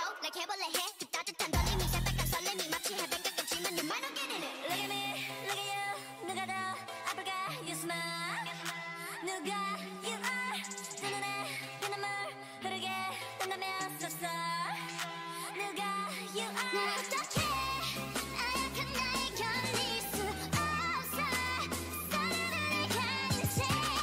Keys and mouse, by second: 0.0 x, 1.4 a, 2.0 middle click, 3.5 click, 3.9 x, 5.1 ctrl+r, 7.2 z, 7.6 c, 8.7 z, 9.8 c, 10.4 z, 10.8 g, 13.8 x, 14.7 Tab, 15.4 middle click, 16.1 middle click, 18.9-20.4 drag, 20.4 shift+a, 23.3 click.